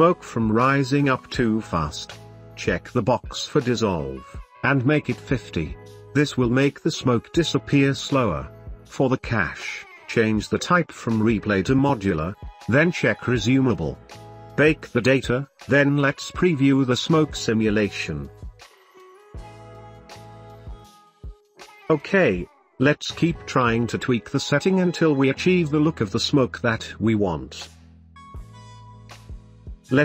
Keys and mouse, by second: 4.2 click, 5.7-7.9 drag, 8.0 space, 8.6-11.0 drag, 12.5-15.0 drag, 15.0-16.6 right drag, 17.0 right drag, 17.5 middle click, 17.8 space, 20.7 shift+space, 20.8-21.2 shift+drag, 21.9 space, 22.6 space, 25.3-27.3 drag, 25.3 space.